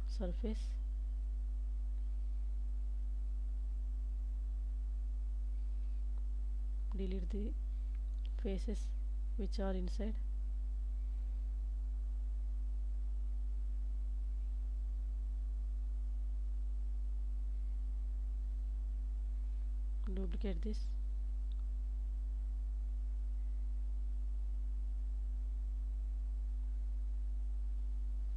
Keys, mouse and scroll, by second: 0.3 middle click, 1.7 KP_1, 2.4 Tab, 3.1 alt+z, 4.2 3, 4.9 ctrl+space, 6.5-8.0 drag, 12.0 x, 14.3 alt+z, 14.7 middle click, 16.3 Tab, 17.1 ctrl+s, 17.5 click, 18.2 middle click, 19.0 shift+middle click, 20.1 click, 21.3 s, 22.1 shift+z, 25.6 click, 26.3 middle click, 27.7 g, 28.1 z.